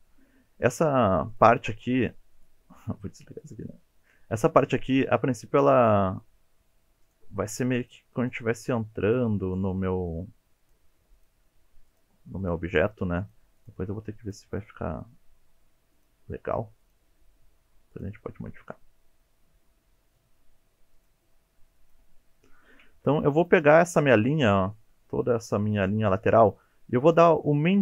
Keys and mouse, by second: 1.5 g, 3.4 click, 4.4 shift+middle click, 5.5 middle click, 7.4 g, 7.8 click, 8.3 click, 8.4 g, 9.1 click, 9.5 click, 9.6 g, 10.6 click, 11.2 click, 11.5 g, 11.9 click, 12.5 click, 12.8 g, 13.2 click, 13.6 click, 13.9 g, 14.3 click, 15.4 g, 16.0 click, 17.0 g, 17.9 click, 18.8-20.3 middle drag, 21.2 g, 21.8 click, 22.4 middle drag, 23.0 2, 23.4 alt+click, 24.1 middle click.